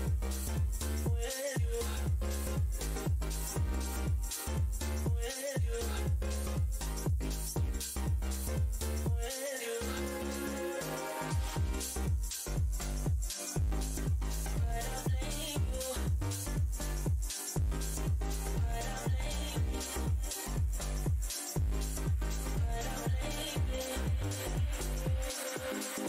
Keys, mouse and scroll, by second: 3.0 alt+scroll up 1, 3.0 w, 3.6 alt+click, 7.8-8.6 typing, 9.3 alt+click, 11.9 space, 15.0 click, 18.7 z, 20.1 click.